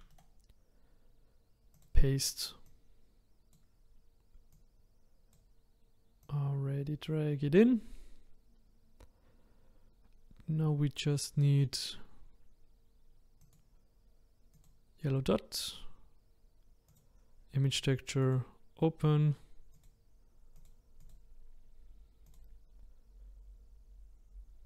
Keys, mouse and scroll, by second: 1.8-4.5 right drag, 4.5-17.7 drag, 18.4-22.8 drag.